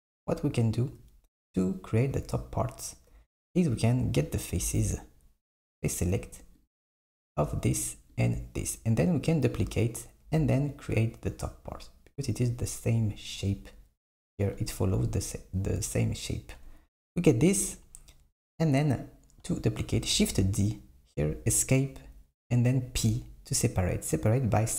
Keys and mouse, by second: 4.7 Tab, 5.9 click, 8.2 shift+click, 20.2 shift+d, 23.1 p.